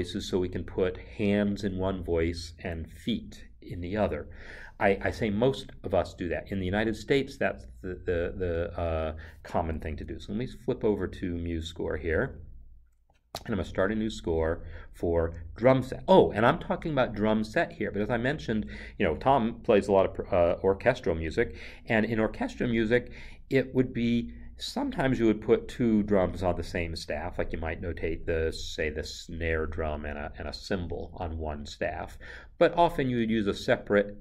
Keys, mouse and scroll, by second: 10.1 alt+Tab, 12.1 alt+Tab, 13.3 ctrl+n.